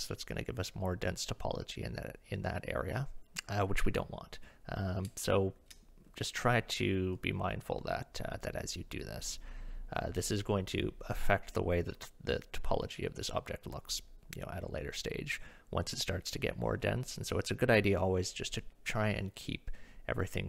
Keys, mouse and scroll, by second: 5.1 shift+middle click, 6.0 middle click.